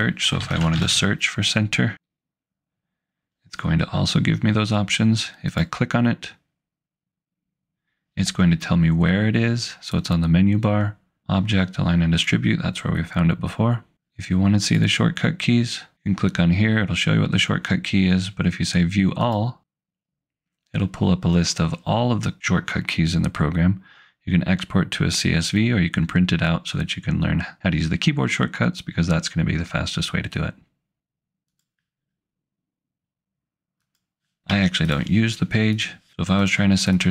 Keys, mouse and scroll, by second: 0.3-1.3 typing, 5.6 click, 14.6 click, 19.3 click, 31.5 click, 33.8 click, 34.5 Delete, 35.8 click.